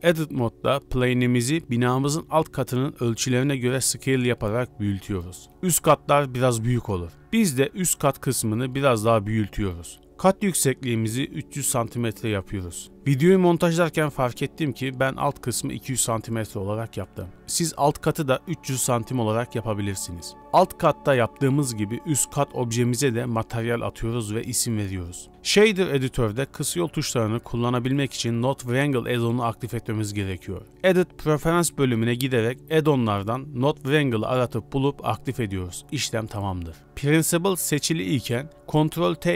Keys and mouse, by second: 2.9 s, 7.6 middle click, 8.3 z, 9.1 g, 10.3 click, 10.7 e, 21.0 x, 21.8 u, 22.0 click, 22.7-25.7 drag, 27.5 ctrl+click, 28.8 middle click, 29.4 click, 31.0-32.0 drag, 37.4 click, 37.9 click.